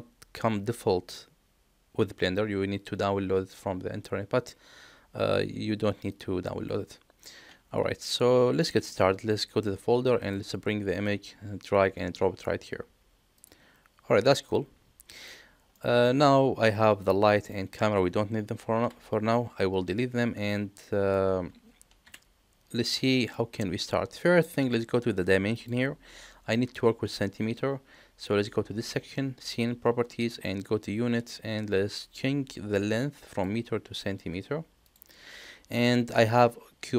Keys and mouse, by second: 6.1 click, 8.6 middle click, 13.4 drag, 14.5-15.1 middle drag, 15.7 middle click, 16.9 click, 18.8 Delete, 20.8 middle drag, 22.0 KP_1, 23.0-23.4 shift+middle drag, 25.5 click, 30.2 click, 33.3-35.0 drag.